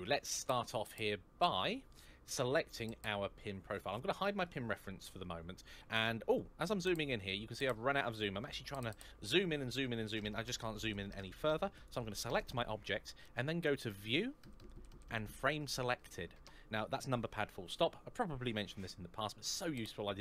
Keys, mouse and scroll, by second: 0.6 middle click, 4.2 click, 4.6-5.2 scroll up 1, 6.1-7.6 scroll down 1, 7.6-9.2 scroll up 1, 10.3-10.9 scroll up 1, 11.5 click, 13.7 click.